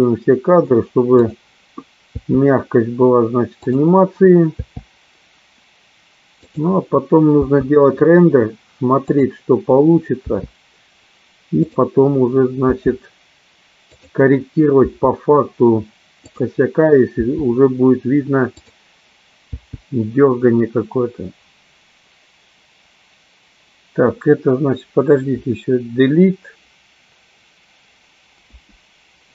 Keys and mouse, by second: 1.9 click, 4.3 click, 5.2 i, 7.0 click, 9.6 click, 10.6 i, 12.3 click, 13.1 i, 14.5 click, 16.9 click, 17.7 i, 19.1 click, 19.9 i, 25.4 Delete, 28.9 Delete.